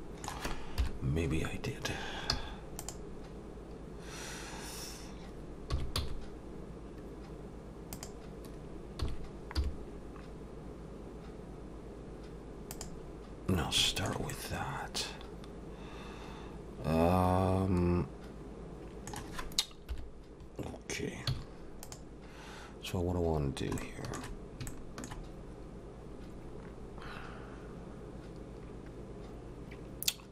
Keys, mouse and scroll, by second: 0.8 KP_7, 2.3 z, 13.9 shift+middle click, 14.3 middle click, 19.9 KP_7, 21.3 z, 23.5 scroll down 1, 23.8 shift+middle click.